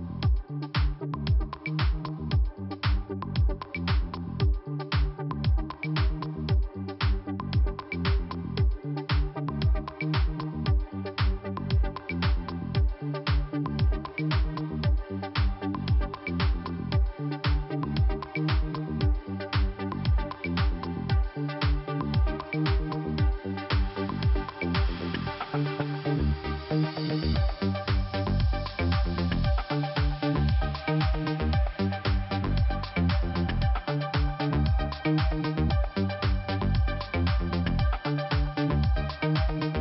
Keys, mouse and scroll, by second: 1.4 click, 1.5 click, 2.1 click, 3.5-3.9 scroll down 2, 5.1 click, 5.7 click, 9.0 click, 9.1 click, 9.8 click, 9.9 click, 10.8 scroll up 2, 11.4 middle click, 12.7 click, 14.6 click, 14.7 click, 15.5 click, 16.5 click, 17.8 click, 17.9 click, 19.1 click, 19.9 click, 21.8 click, 21.8 click, 22.2 click, 22.3 click, 23.6 click, 23.8 click, 24.1 click, 24.2 click, 24.5 click, 24.5 click, 25.1 click, 26.5 click, 26.5 click, 27.7 scroll down 2, 28.9 middle click, 29.0 middle click, 29.3 typing, 30.2-31.2 scroll up 1, 31.3 scroll up 1, 31.6 click, 32.7 middle click, 33.5 scroll up 1, 34.3 click, 35.9-36.7 scroll up 2, 36.7 click, 37.4 click, 37.5 click, 38.5 click.